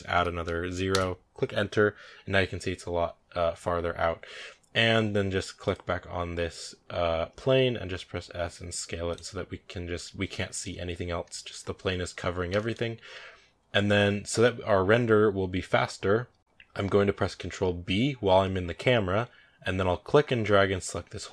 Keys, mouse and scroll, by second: 0.7-4.0 drag, 4.0 scroll down 2, 5.5 right click, 6.7-8.3 right drag, 7.6 s, 10.1 scroll down 3, 10.4 shift+middle drag, 10.6-11.2 scroll up 3, 11.2-14.2 shift+middle drag, 14.2-17.7 scroll down 1.